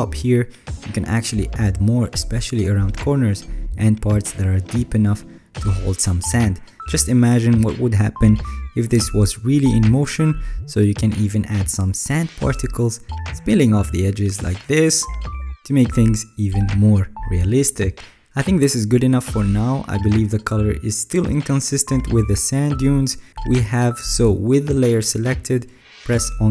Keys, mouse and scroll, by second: 1.4 alt+scroll, 1.5-2.3 alt+scroll up 6, 2.4 alt+scroll up 1, 3.3 alt+right click, 11.8 middle click, 11.8 alt+scroll, 14.4-14.8 alt+scroll, 15.7-16.1 alt+scroll, 16.0 ctrl+s, 21.8 middle click, 21.8 alt+scroll.